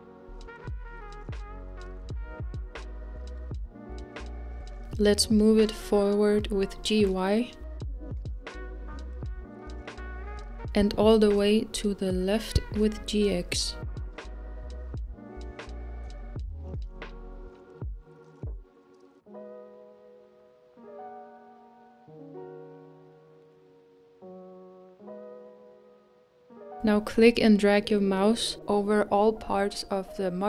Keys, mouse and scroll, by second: 1.3-4.4 scroll up 2, 5.7 click, 9.5-9.9 scroll up 1, 11.4-12.1 middle drag, 12.1 g, 18.2 click, 18.6 scroll down 1, 18.8-23.2 middle drag, 24.4 scroll down 2, 24.7-27.3 middle drag, 27.3 click.